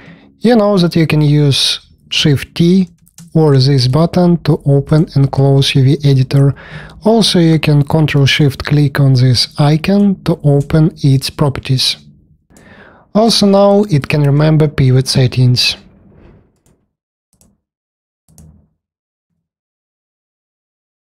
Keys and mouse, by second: 0.4 shift+t, 2.1 shift+t, 2.8 shift+t, 14.7 r, 19.1 r.